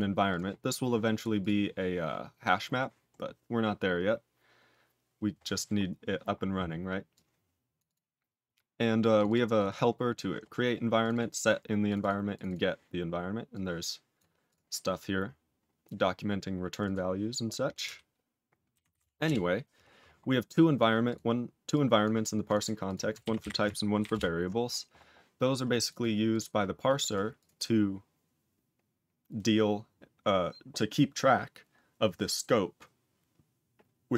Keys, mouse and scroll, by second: 0.2 click, 0.7 click, 1.1 click, 1.3 click, 3.1 scroll down 3, 5.7-7.1 scroll down 4, 7.1 click, 7.7 click, 7.8 click, 9.1 click, 9.2 double click, 9.5 click, 9.6 double click, 10.0 scroll down 2, 10.9 click, 11.1 double click, 11.8 click, 11.9 double click, 12.3 click, 12.4 double click, 13.5 click, 14.1 click, 14.4 click, 14.8-15.4 scroll down 5, 15.5 scroll up 8, 16.3 scroll up 2, 16.8 click, 19.2 Return, 20.0-20.4 scroll down 3, 20.4 click, 20.7 click, 21.0 click, 22.0 click, 22.4 click, 22.5 double click, 22.8 click, 24.1 ctrl+Return, 25.7 click, 25.8 double click, 26.2 click, 27.0 double click, 27.3 click, 30.3-31.7 scroll down 1, 31.7-34.1 scroll down 1.